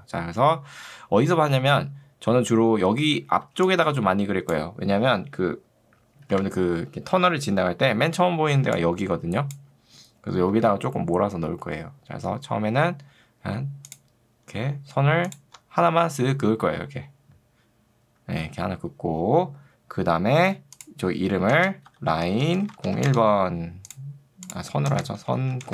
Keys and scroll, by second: 3.5 ctrl+2, 6.3 Escape, 8.7 ctrl+2, 10.5 Escape, 22.3 l, 22.9 0, 23.1 Return, 24.9-25.7 typing.